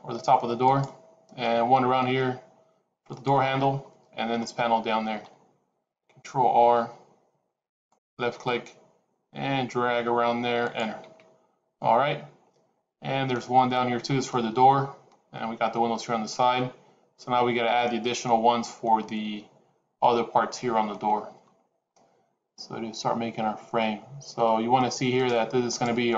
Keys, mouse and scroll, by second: 6.5 ctrl+r, 25.2 click, 25.6 click, 26.0 shift+click.